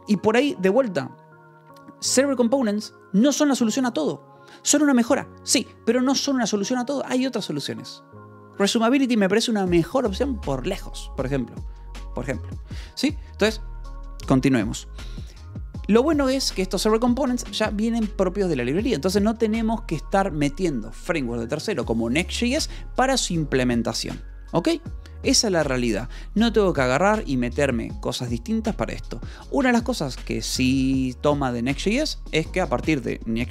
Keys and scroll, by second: 16.9 Escape.